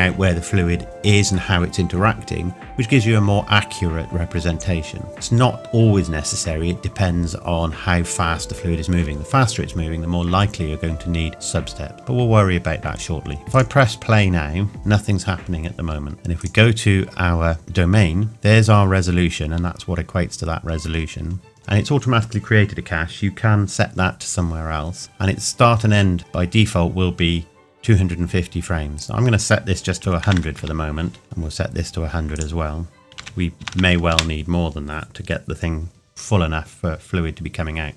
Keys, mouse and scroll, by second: 13.5 click, 13.6 click, 16.4 click, 20.5-20.9 scroll down 1, 21.6 ctrl+s, 29.0 click, 32.4 click, 33.2 KP_1, 33.6 KP_0.